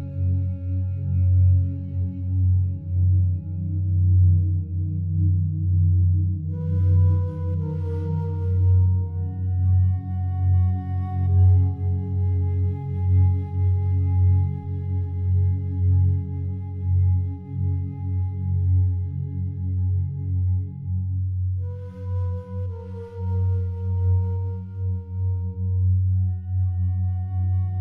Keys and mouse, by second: 1.2 click, 2.1-4.6 alt+drag, 4.8 alt+shift+click, 5.3 ctrl+alt+click, 6.7 click, 7.3 alt+click, 10.5-12.2 drag, 12.6-13.8 alt+drag, 14.8 alt+click, 15.3 ctrl+z, 15.8 click, 16.1 alt+click, 17.2-18.8 drag, 19.0 alt+click, 21.1 alt+shift+click, 22.0 alt+click, 23.0 ctrl+alt+click, 27.0 alt+click.